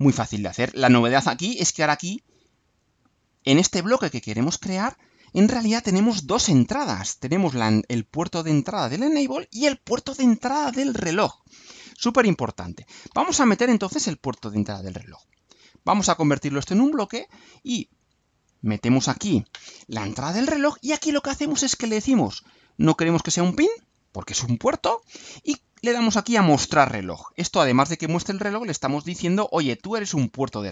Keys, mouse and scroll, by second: 1.0 click, 2.7-4.1 drag, 4.4 click, 6.0 click, 18.3 click, 22.9 click, 26.7 click, 29.4 click.